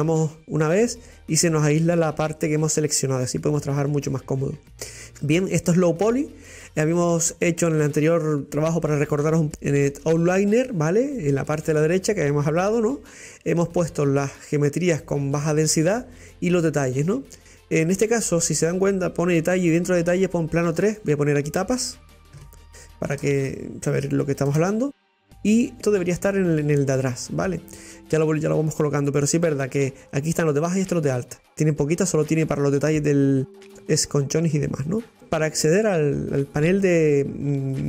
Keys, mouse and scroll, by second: 1.4 scroll down 2, 2.0-4.9 middle drag, 4.9 scroll up 2, 5.1-7.4 middle drag, 7.4 scroll up 1, 20.7-23.9 drag, 31.3-33.5 middle drag, 33.5 scroll up 1, 33.7-34.0 scroll down 2, 34.1 middle click, 35.0 scroll down 3.